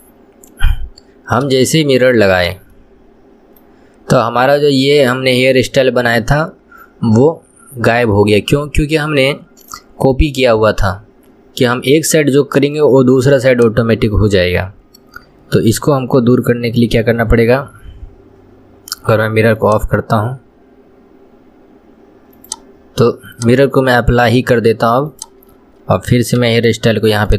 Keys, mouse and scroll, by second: 9.6-13.8 middle drag, 13.8 click, 20.1 click, 23.6-26.6 drag, 26.8 Tab.